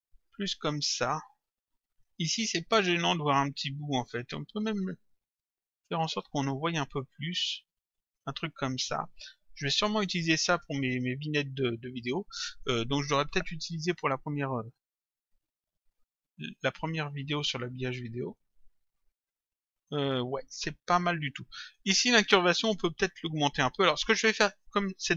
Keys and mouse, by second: 4.0 click, 14.9 click, 16.2 click.